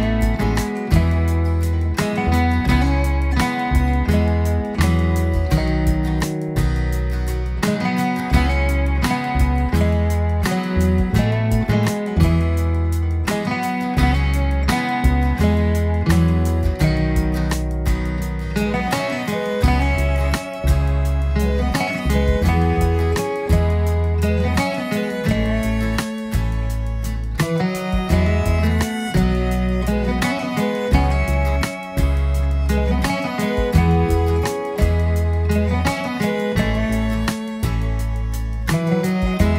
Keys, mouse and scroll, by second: 1.3 click, 1.9-3.9 drag, 5.0 click, 5.2 click, 5.7 click, 7.2 click, 7.7-9.9 drag, 11.6 click, 12.1-15.2 drag, 16.2-19.8 drag, 20.2-22.1 middle drag, 23.3 click, 24.3-25.0 drag, 28.1 click, 30.6 click, 31.3-33.1 scroll down 4, 33.1-33.9 drag, 34.4-34.8 scroll up 2, 36.3 click, 37.6 click, 38.4 click, 38.9 click.